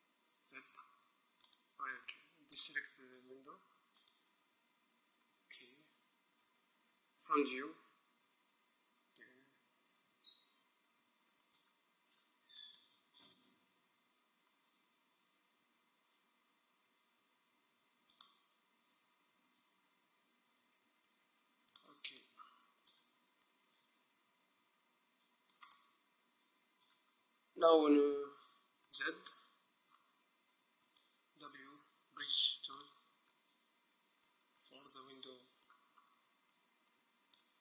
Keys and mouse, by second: 0.1 z, 1.6 right click, 4.2-5.7 right drag, 5.4 middle click, 7.3 KP_1, 9.1 e, 18.3-19.9 drag, 19.0 e, 21.9 click, 22.5-24.9 middle drag, 25.1 middle click, 25.9-27.8 middle drag, 27.8 z, 28.9 right click, 29.4-32.9 middle drag, 31.0 click, 31.2-32.9 right drag, 31.9 w, 33.4-35.0 middle drag.